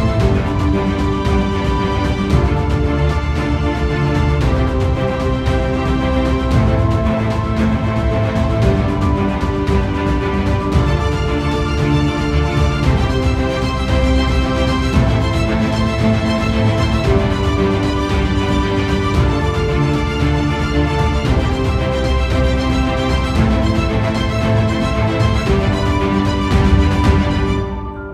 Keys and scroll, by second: 9.2 ctrl+c, 18.2 ctrl+c, 18.7 ctrl+=.